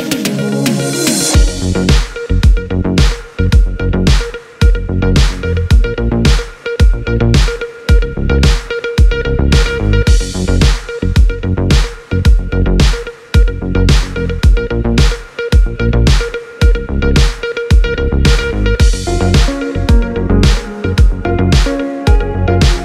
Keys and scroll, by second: 0.0 space, 9.6 space.